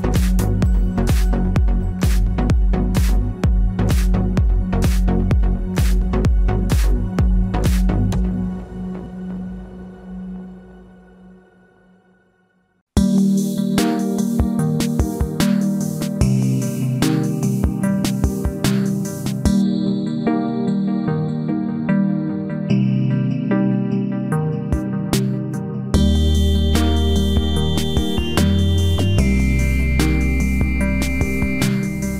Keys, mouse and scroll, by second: 1.4 ctrl+r, 2.6 right click, 3.1 KP_Decimal, 3.5 click, 4.1 b, 4.4-5.4 middle drag, 4.6 g, 7.5-9.2 right drag, 7.8 g, 9.2 click, 9.4-11.1 middle drag, 10.7 ctrl+r, 13.9-14.9 middle drag, 17.1 right click, 18.0-20.5 drag, 19.0 c, 21.2-23.0 drag, 21.5 c, 24.3-26.3 right drag, 24.5 ctrl+r, 26.4 ctrl+Tab, 27.3 right click, 27.5 c, 30.6 e, 30.9 right click.